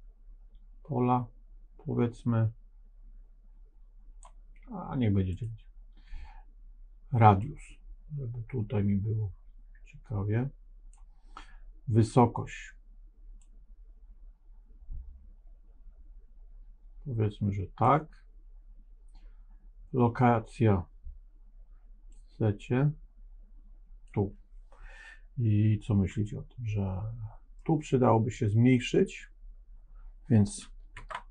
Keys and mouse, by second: 5.2 click, 7.3-10.8 drag, 13.3-17.7 drag, 22.0-24.0 drag, 26.3-27.5 middle drag, 30.9 ctrl+Tab.